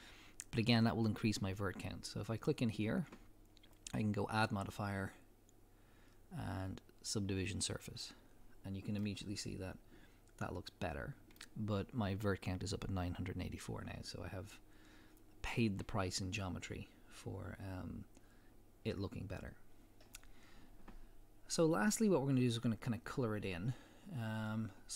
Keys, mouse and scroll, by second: 2.3 click, 3.8-9.0 drag, 9.0-9.6 middle drag.